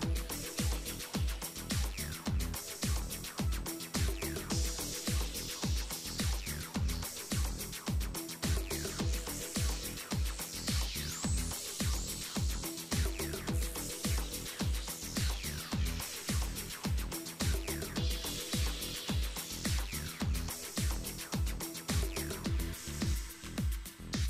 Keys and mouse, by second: 1.0-4.3 right drag, 6.6-7.7 middle drag, 7.8 middle click, 8.8 ctrl+Tab, 9.3 z, 10.0 g, 11.2 ctrl+Tab, 12.5 right click, 12.7-14.0 middle drag, 14.9 z, 18.2 shift+right click, 18.8 shift+right click, 21.0-22.9 middle drag, 23.8 e.